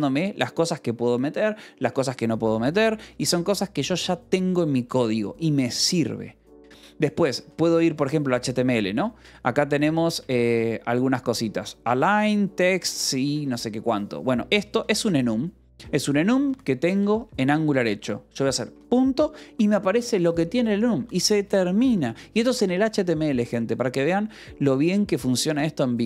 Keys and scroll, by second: 0.2 ctrl+n, 0.5 ctrl+p, 2.1 ctrl+n, 2.4 Return, 3.6 ctrl+s, 6.4 :, 7.2 k, 7.8 Return, 9.1-13.0 typing, 14.3-17.1 typing, 15.6 Escape, 16.8 Escape, 18.2 a, 18.6 ., 20.5 ctrl+n, 20.8 ctrl+p, 21.4 Return, 21.7 Escape.